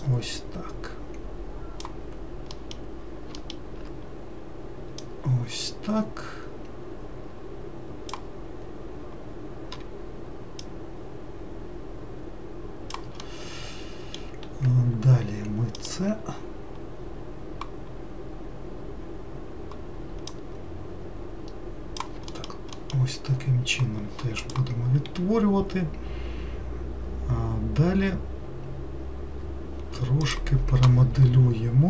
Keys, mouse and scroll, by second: 0.3 click, 2.8 middle click, 5.2 click, 10.9 click, 13.5-16.0 middle drag, 16.0 click, 20.6 click, 22.6 alt+middle click, 23.0 alt+middle click.